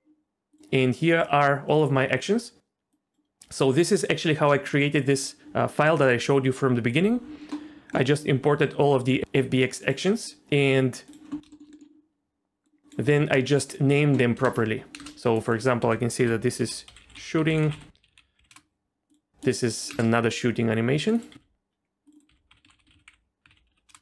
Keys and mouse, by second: 2.9 click, 4.2 click, 7.6 middle click, 11.5 shift+middle click, 11.7 middle click, 12.6 click, 14.4 space, 15.5-18.5 drag, 15.5 space, 17.1 o, 18.1 BackSpace, 19.9 space, 21.1 click, 21.3 s, 22.1-23.9 drag, 22.7 o.